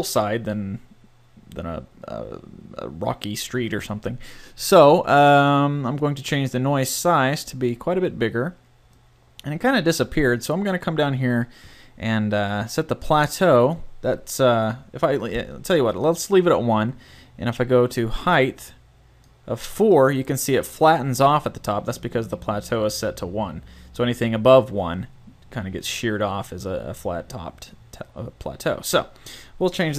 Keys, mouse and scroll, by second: 6.9-8.8 drag, 10.2-11.2 middle drag, 13.0-14.8 drag, 17.2-19.0 drag, 20.0-21.4 middle drag, 25.0 typing, 29.0-29.9 drag.